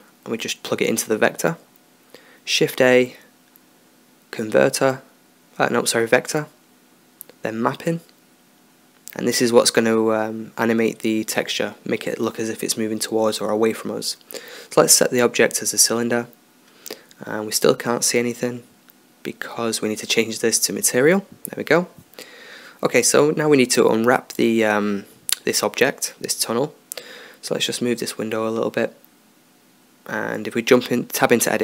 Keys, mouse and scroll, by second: 0.3-2.1 drag, 2.3 shift+a, 9.7-12.2 drag, 12.2-13.3 middle drag, 13.3-15.0 drag, 17.1 middle drag, 20.2-20.6 drag, 27.9-29.6 drag, 30.1 Tab.